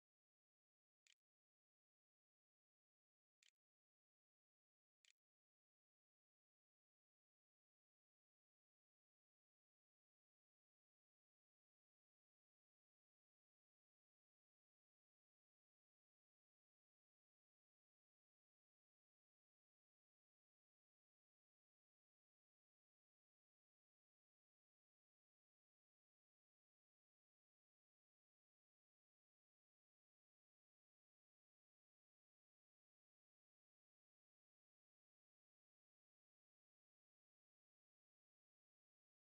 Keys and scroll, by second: 0.0-3.0 typing, 4.7 ctrl+s.